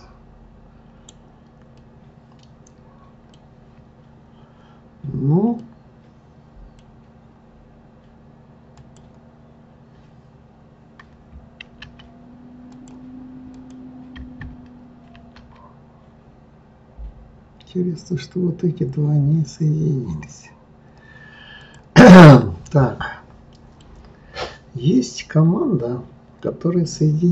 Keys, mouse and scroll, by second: 1.7-4.8 middle drag, 5.6-8.6 middle drag, 8.7 click, 11.6 ctrl+r, 13.5 click, 15.1 ctrl+r, 22.2-23.9 middle drag.